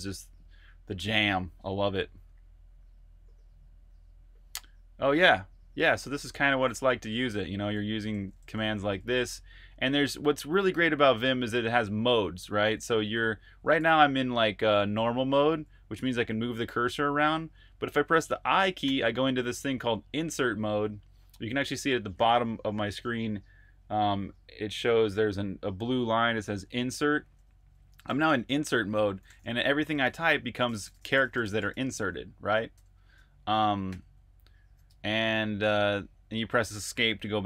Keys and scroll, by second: 6.9-9.2 typing, 12.3-18.7 typing, 28.7-34.9 typing.